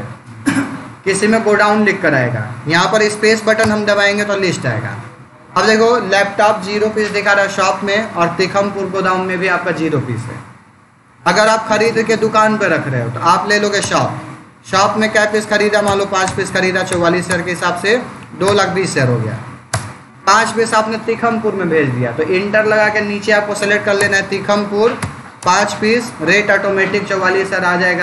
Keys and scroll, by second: 3.5 space, 5.6 Down, 7.9 Down, 10.9 Up, 13.7 Return, 15.7 5, 16.1 Return, 19.6 space, 20.2 Down, 23.8 Return, 24.8 5, 25.3 Return.